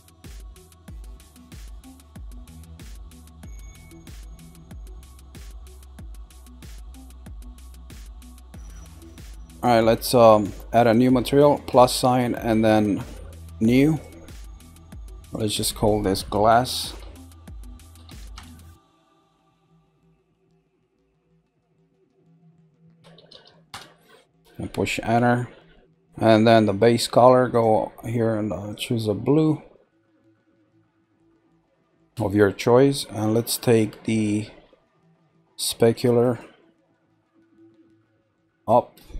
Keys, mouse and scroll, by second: 0.5 shift+click, 0.9 shift+click, 1.3 scroll down 1, 1.8 shift+middle click, 2.4 shift+click, 3.0 shift+click, 3.4 middle click, 4.1-4.7 scroll up 3, 4.7-5.7 shift+middle drag, 5.7 shift+click, 6.3 shift+click, 7.1 shift+click, 7.5 shift+click, 7.9 middle click, 8.6-9.4 scroll down 2, 11.7 click, 13.8 click, 15.0 click, 15.2 click, 20.5 click, 20.7 click, 23.3 s, 27.5 click, 33.1 scroll down 1, 33.6-34.3 scroll down 1, 35.9-37.8 drag, 38.6-39.1 drag.